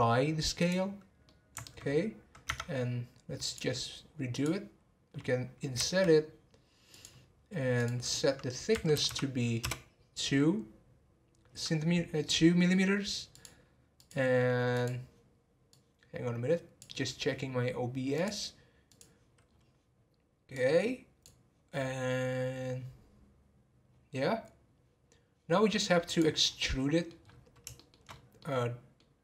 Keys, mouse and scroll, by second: 1.2 middle click, 1.8-2.4 scroll up 1, 2.4 Tab, 3.4-4.4 drag, 5.8 typing, 7.8-9.1 drag, 9.1 m, 19.4-20.2 scroll down 1, 20.2-22.6 scroll down 3, 26.1 click, 26.4 scroll down 1, 26.7 middle click, 27.2-27.7 scroll up 3, 27.7 shift+middle click, 28.0 scroll up 1, 28.4-29.2 middle drag.